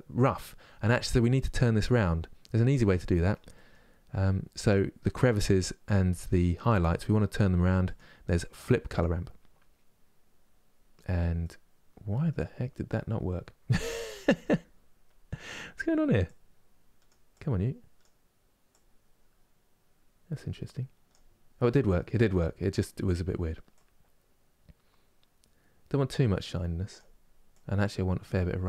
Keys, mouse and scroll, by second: 8.7-11.2 drag, 11.2-16.0 middle drag, 16.0-21.3 drag, 21.3 middle click, 22.1 scroll down 1, 23.5-28.6 drag.